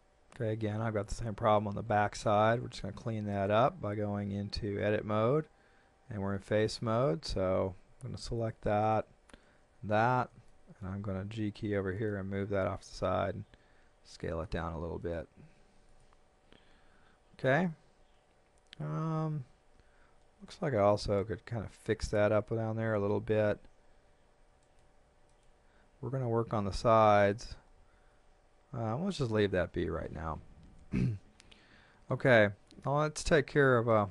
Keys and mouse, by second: 2.0 shift+middle click, 2.8 shift+middle click, 3.3 right click, 4.8 Tab, 6.6 right click, 8.8 shift+right click, 10.5 shift+middle click, 11.4 g, 12.0 middle click, 12.8 click, 14.1 click, 15.0 middle click, 15.9 click, 24.6 right click, 27.2 click, 28.0 a, 33.5 KP_3.